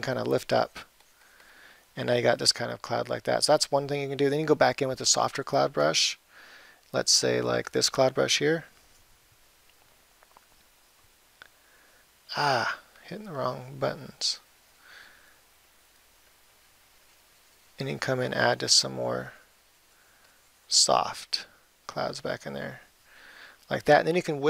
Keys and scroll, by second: 9.9 ], 11.4 ].